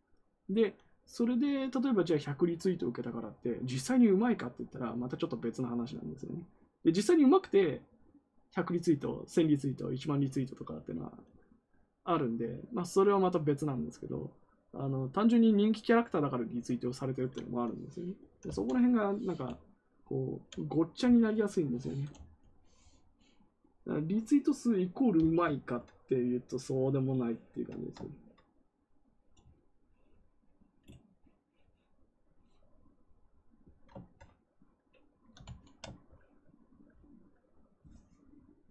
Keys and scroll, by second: 18.1-19.0 typing, 21.0 t.